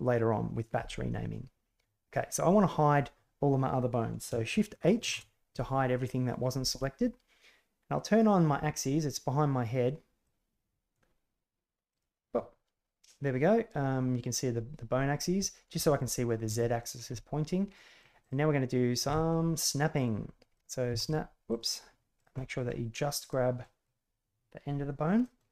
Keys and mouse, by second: 5.0 shift+h, 10.2-10.9 drag, 11.8 click, 15.2-16.0 middle drag, 16.5 shift+drag, 17.7 middle drag, 18.2 right click, 19.0 g, 20.5 right click, 20.8 g, 22.1 right click, 22.3 middle click, 23.1 right click, 23.5 middle click, 25.2 middle click.